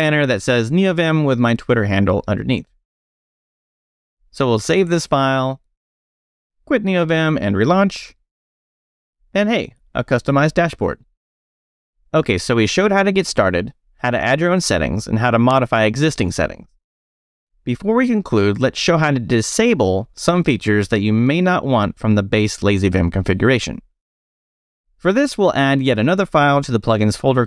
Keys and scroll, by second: 3.8 Escape, 4.5-7.0 typing, 5.9 Escape, 7.1 Return, 18.6 space, 18.8 e, 21.2 j, 21.8 Return, 22.3 j, 22.9 Return, 24.3-27.4 typing.